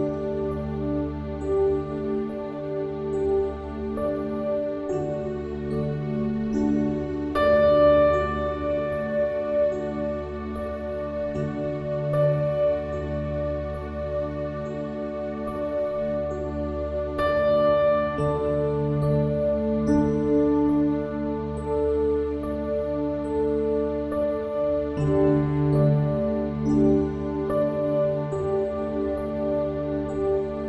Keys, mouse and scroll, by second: 0.8 e, 8.1-10.5 middle drag, 10.8 Tab, 12.6 shift+d, 13.7 middle click, 15.6-17.5 drag, 19.5-24.2 middle drag, 23.0 shift+a, 25.5 s, 26.9 s, 29.0-30.6 drag.